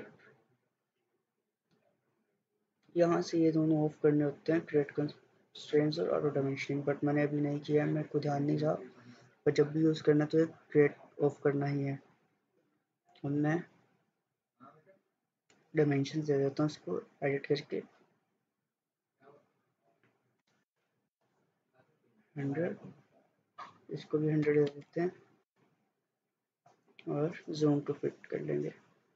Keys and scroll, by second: 10.2 Escape, 20.2-21.4 typing, 24.5-24.9 typing, 25.5 Return.